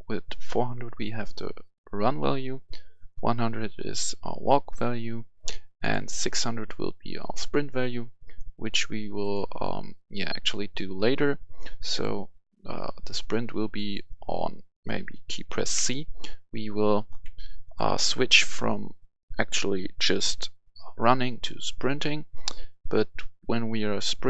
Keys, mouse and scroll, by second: 7.9-9.1 right drag, 9.1 click, 13.7 right click, 15.7 c, 17.0 Delete, 17.6 click, 17.9 Delete.